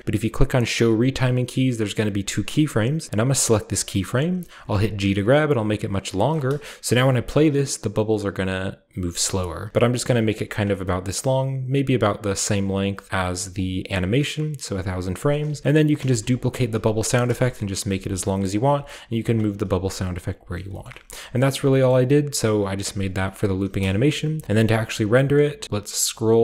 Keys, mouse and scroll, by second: 0.0-0.9 scroll up 1, 0.9-2.1 scroll up 1, 3.4 right click, 3.9-4.7 scroll down 1, 4.7 g, 6.4-8.1 typing, 6.5-8.1 scroll up 1, 9.1-9.7 typing, 9.3 drag, 9.7 drag, 10.9-12.4 scroll down 1, 11.2-12.6 middle drag, 11.4 typing, 13.0 g, 13.1 middle drag, 14.8 middle click, 15.7 middle click, 16.0-18.7 typing, 16.6 scroll down 1, 19.5-21.4 scroll up 1, 19.8 typing, 20.1 drag, 20.9 ctrl+middle click, 21.5 middle click, 22.5-23.2 scroll down 1, 23.2-25.6 scroll up 1, 23.7 typing, 26.0-26.4 scroll down 1.